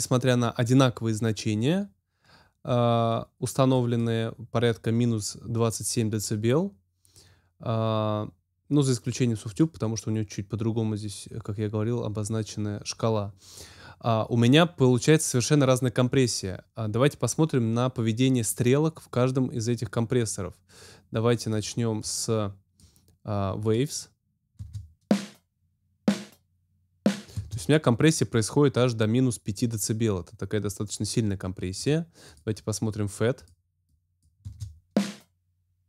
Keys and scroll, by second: 24.5 space, 27.3 space, 34.4 space.